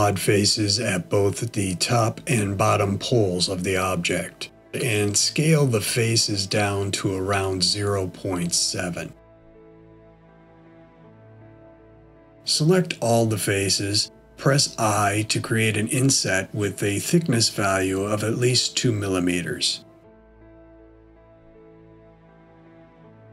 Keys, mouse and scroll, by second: 2.6 s, 9.2 middle click, 11.2 a, 14.4 i, 19.0 click.